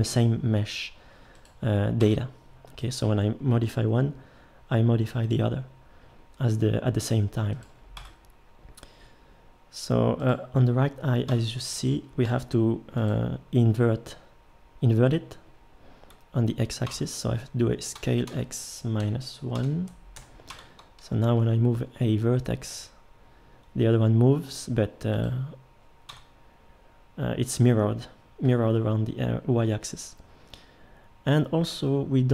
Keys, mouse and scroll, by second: 2.0 Tab, 3.6 g, 8.0 Tab, 11.3 Tab, 12.3 g, 16.9 Tab, 17.9 s, 20.5 Tab, 21.3 g, 26.1 Tab.